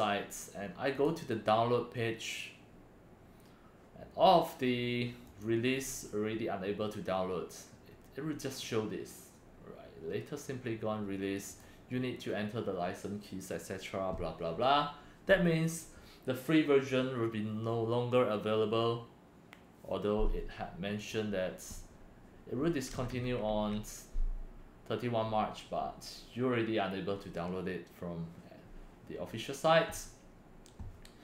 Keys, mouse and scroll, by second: 0.9 click, 5.2 click, 11.4 click, 21.0 click, 22.9 Left, 23.1 Left, 23.4 Left.